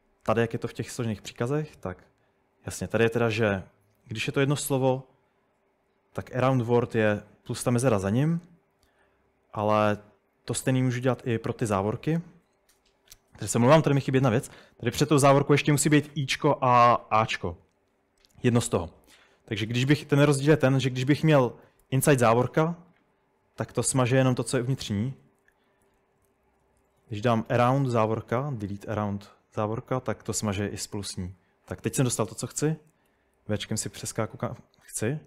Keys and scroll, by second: 20.6-22.4 typing, 25.0 Escape, 25.2-28.3 typing, 30.6 Escape, 31.5-33.1 typing.